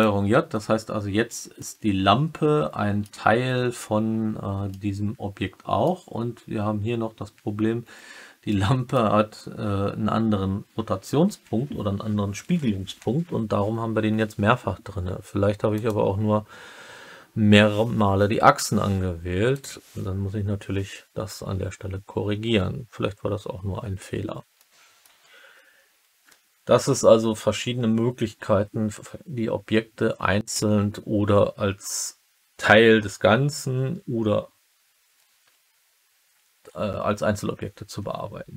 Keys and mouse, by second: 1.5-3.0 alt+middle drag, 4.6-5.8 alt+middle drag, 8.4-8.9 alt+middle drag, 15.7 click, 19.5 click, 24.5-24.9 middle drag.